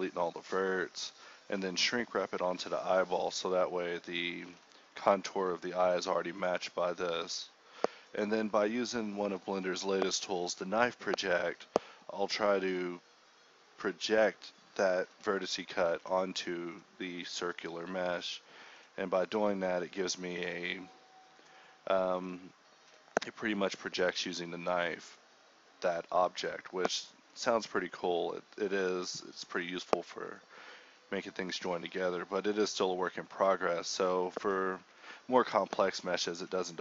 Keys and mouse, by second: 0.6 click, 0.8 z, 0.9 z, 1.2 z, 1.6 z, 2.3 middle drag, 2.4 click, 2.8-3.4 typing, 4.9 Tab, 5.0 a, 5.5 right click, 5.6 click, 5.8 z, 6.1 click, 6.9-8.9 typing, 8.2 click, 11.9 ctrl+b, 12.3 ctrl+z, 12.9 KP_7, 14.2 KP_7, 14.6 ctrl+b, 15.9 click, 16.4 Tab, 16.6 click, 17.1 Tab, 17.4 alt+h, 17.6 KP_1, 18.1 z, 18.8 click, 19.2 z, 20.2 s, 21.3 z, 21.4 z, 21.9 z, 24.3-25.9 typing, 28.6 Tab, 28.7 ctrl+a, 29.6-31.4 drag, 31.4 z, 31.4 click, 31.8 Tab, 32.0 click, 32.4 z, 32.6 z, 32.9 z, 33.2 z, 34.6 ctrl+b, 35.7 ctrl+r, 36.2 k.